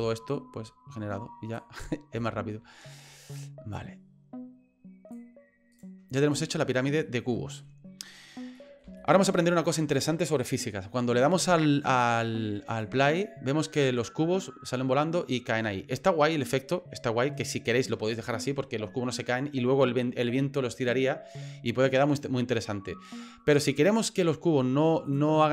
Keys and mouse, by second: 0.0-1.5 drag, 2.3 shift+middle click, 3.7-5.1 drag, 5.7 right click, 7.0 middle click, 8.5 middle click, 9.1 shift+middle click, 12.7 click, 16.0 middle click, 17.7 click, 19.0 middle click, 24.1 middle click, 25.0 click.